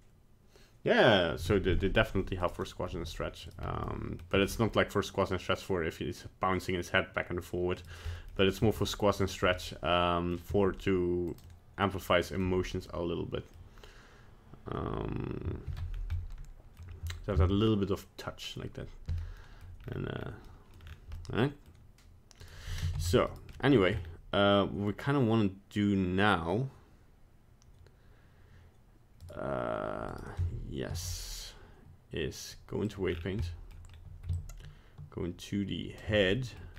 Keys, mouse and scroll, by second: 2.5 right click, 3.0 g, 3.9 middle click, 4.4 g, 8.1 middle click, 8.6 g, 9.7 middle click, 10.5 g, 11.5 middle click, 11.5 middle click, 12.2 middle click, 13.0 middle click, 15.7 alt+g, 15.9 scroll down 1, 16.2 middle click, 19.5 middle click, 19.9-20.3 scroll up 4, 20.5 middle click, 20.7 middle click, 20.8-21.2 scroll down 4, 21.2 middle click, 22.5 right click, 23.0 ctrl+Tab, 23.3 right click, 23.6 middle click, 23.7 middle click, 23.9-24.2 scroll up 3, 29.2 right click, 30.1 right click, 30.9 ctrl+Tab, 33.1 scroll down 4, 33.5 middle click, 33.9-34.3 scroll up 1, 34.3 shift+click, 36.3 middle click.